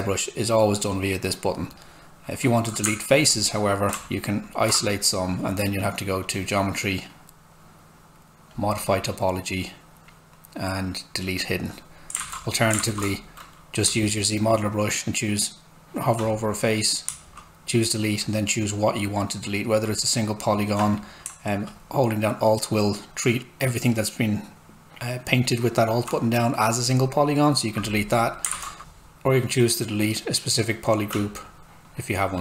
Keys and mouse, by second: 2.8 shift+click, 11.4 click, 12.2 ctrl+z, 13.9 space, 21.7 alt+click, 22.3 alt+right click, 23.4 alt+click, 28.5 ctrl+z, 30.0 click, 30.1 space, 31.9 click.